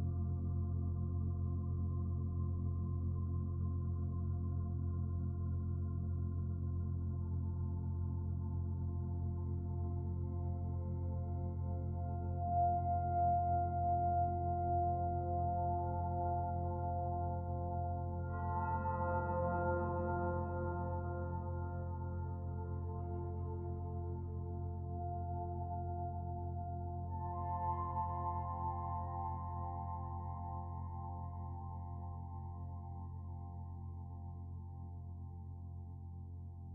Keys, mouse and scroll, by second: 1.4 click, 3.3 s, 12.8-15.7 scroll up 1, 16.5-17.8 scroll down 1, 17.8 click, 19.6 g, 27.1 r, 35.1 g.